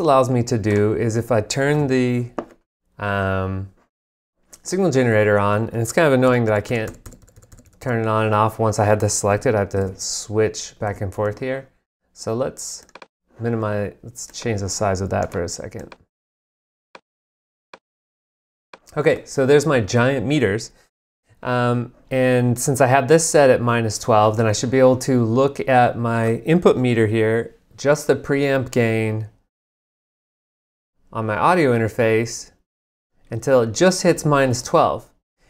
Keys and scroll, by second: 1.7 super+`, 6.3 g, 9.8 super+`.